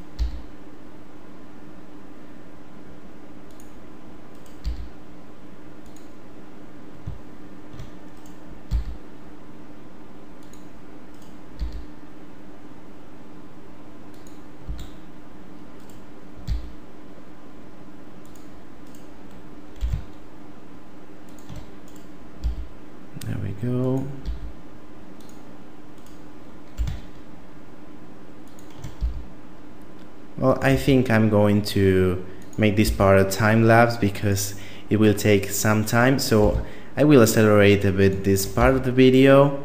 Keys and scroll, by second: 0.1 e, 4.6 e, 8.7 e, 11.5 e, 14.7 a, 16.5 e, 19.8 g, 22.4 e, 24.2 e, 26.7 g, 29.0 e, 30.7 e, 32.8 e, 36.4 g, 38.5 e.